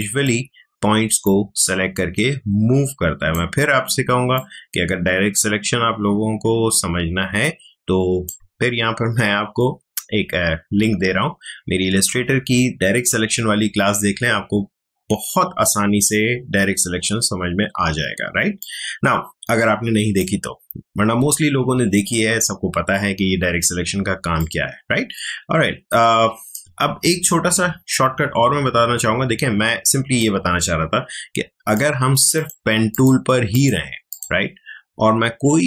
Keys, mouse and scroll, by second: 18.6-22.9 drag, 24.4-28.9 drag, 30.2-32.3 drag.